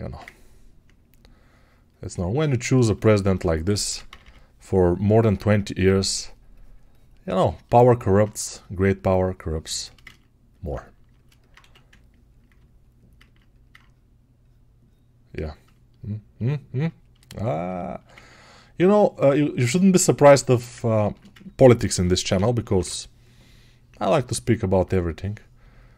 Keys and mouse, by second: 7.8 alt+right click, 16.7-21.2 drag, 25.5 alt+click.